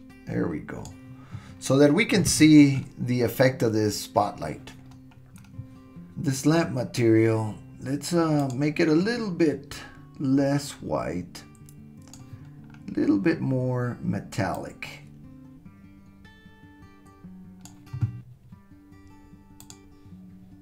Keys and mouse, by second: 14.6-17.7 drag, 19.6 click.